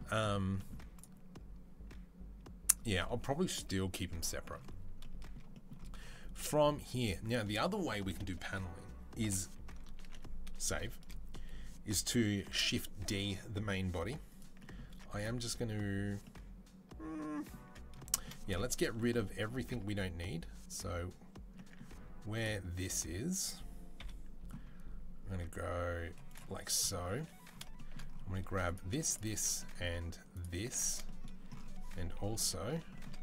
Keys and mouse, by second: 5.2-14.9 shift+middle drag, 10.1 ctrl+s, 12.3 shift+d, 14.7 Tab, 14.9 click, 15.0-20.5 middle drag, 19.5 Tab, 20.5-22.2 drag, 22.2-25.1 middle drag, 23.8 KP_3, 25.1 Tab, 25.8 z, 26.9 3, 28.4 alt+click, 28.8 alt+shift+right click, 29.2 shift+middle click, 29.7 alt+shift+right click, 30.5-33.2 shift+middle drag, 31.9 KP_3.